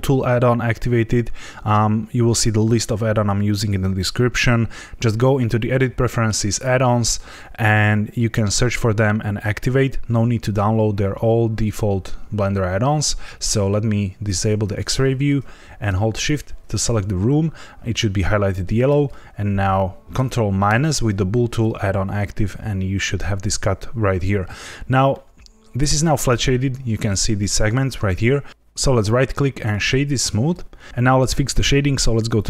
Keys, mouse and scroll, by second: 14.2 click, 16.2 shift+click, 20.6 ctrl+KP_Subtract, 25.0 middle click, 28.9 right click, 30.9 click, 32.3 click.